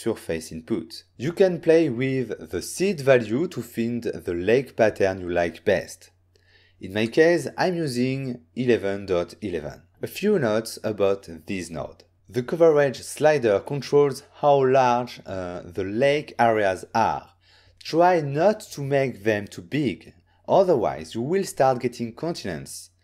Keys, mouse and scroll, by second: 3.4 middle click, 4.1 click, 8.5 click, 8.6 click, 9.1-9.7 typing, 10.2 Return, 15.8 ctrl+middle click, 16.5 ctrl+scroll down 1, 17.5 ctrl+middle click, 17.8-18.3 ctrl+scroll down 1, 19.8-20.5 ctrl+scroll up 1.